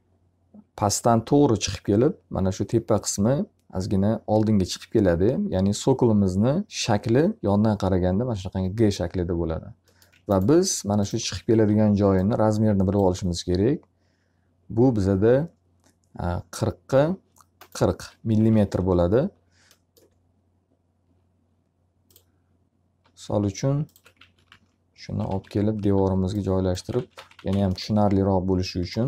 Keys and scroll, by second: 11.0 s, 17.8 alt+r, 23.8 t, 24.4 z, 25.2 w, 25.7 s, 26.9-27.9 typing.